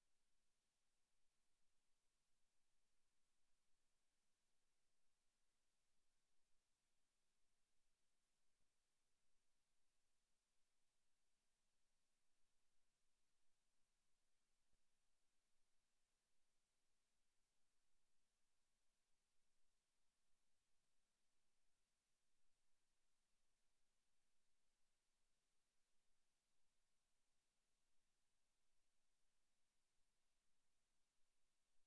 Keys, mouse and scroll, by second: 0.7 click, 2.0 click, 2.2 s, 4.0 click, 4.1 middle click, 5.5 middle click, 6.8 s, 8.1 click, 8.2 s, 9.3 s, 10.1 click, 10.2 s, 10.9 click, 11.7 z, 12.4 s, 14.6 click, 14.8 Tab, 15.4 Tab, 16.5 click, 17.2 click, 21.7 click, 22.6 click, 23.3 Tab, 24.0 middle click, 24.7 a, 25.2 alt+shift+right click, 25.7 s, 27.3 click, 27.4 a, 28.3 a, 28.6 a, 29.0 alt+shift+right click, 29.6 e, 30.0 click, 30.2 s, 31.2 click.